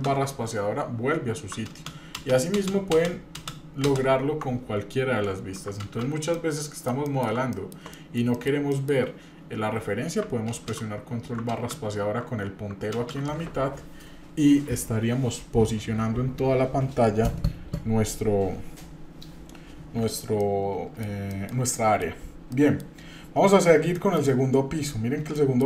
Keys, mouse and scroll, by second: 2.2 ctrl+space, 2.9 ctrl+space, 3.9 ctrl+space, 10.6 ctrl+space, 12.9 ctrl+space, 20.4 middle click, 21.3 shift+middle click, 21.7 middle click, 22.5 middle click, 23.5 scroll up 1, 23.9 shift+middle click, 25.3 shift+middle click.